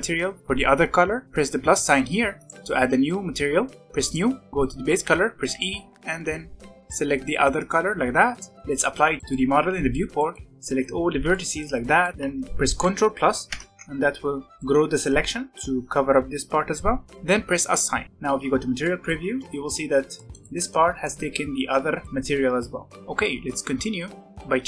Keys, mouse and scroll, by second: 1.2 click, 2.3-4.5 drag, 5.4 e, 8.4 shift+middle click, 8.6 Tab, 9.0 scroll down 1, 9.2-10.5 middle drag, 10.5 scroll up 1, 11.2 b, 12.1-13.5 middle drag, 13.5 ctrl+KP_Add, 14.5-17.0 middle drag, 18.0 z, 18.7 middle click, 19.2 alt+a, 19.5 Tab, 20.1-23.0 shift+middle drag, 23.0 alt+a, 23.2-24.3 middle drag, 24.3 click.